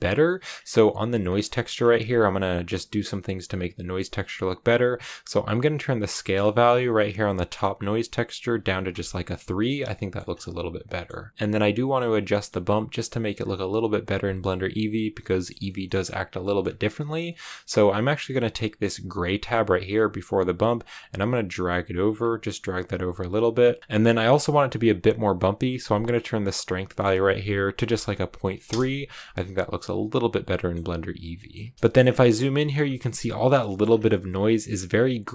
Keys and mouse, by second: 0.1 middle click, 1.1 click, 6.1-8.8 drag, 12.2 middle click, 12.8 middle click, 13.3 click, 13.9 click, 15.2 click, 15.6 click, 16.3 click, 17.2 middle click, 20.6-22.0 drag, 22.8 click, 24.0 click, 26.3-29.1 drag, 30.4 middle click, 31.3 middle click, 31.7 shift+middle click, 32.4 shift+middle click, 33.5 shift+middle click.